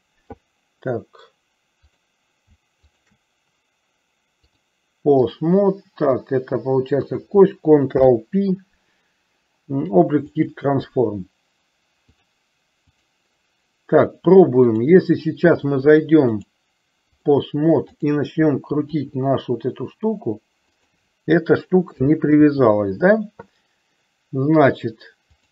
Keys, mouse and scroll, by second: 2.0 click, 4.7 click, 7.2 click, 8.1 ctrl+p, 12.2-13.2 drag, 16.3-17.5 drag, 18.1 click, 19.1 r, 22.5 ctrl+z.